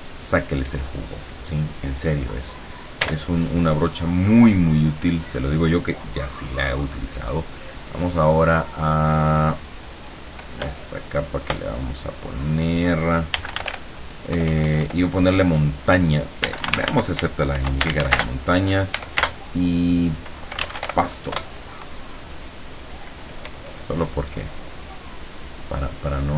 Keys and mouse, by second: 3.1 l, 6.9 click, 8.1 click, 12.5 click, 13.2-14.3 typing, 16.2-19.3 typing, 20.4-21.5 typing.